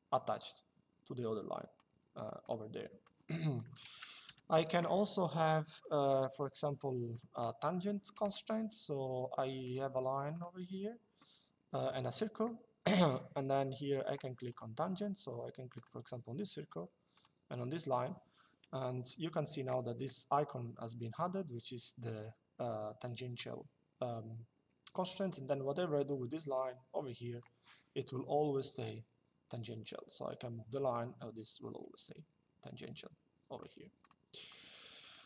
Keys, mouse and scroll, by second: 2.1 click, 4.0 Delete, 5.5 click, 7.2 Escape, 7.9 l, 9.3 click, 10.4 Escape, 14.2 click, 15.5 click, 16.8 click, 18.7 Escape, 23.1 click, 27.8 click, 33.7 click.